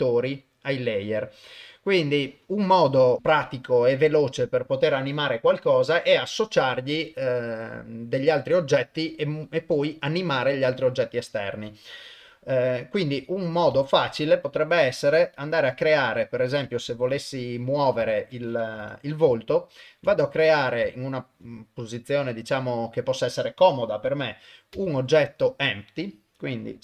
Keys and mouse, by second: 0.5 middle click, 11.0 click, 13.8 shift+right click, 14.4 middle click, 15.8 KP_1, 17.0 ctrl+middle drag, 17.5 ctrl+middle drag, 18.0 shift+middle click, 18.8 KP_0, 19.5-20.1 ctrl+middle drag, 20.2-20.5 shift+middle drag, 21.1 shift+right click, 24.7 shift+a.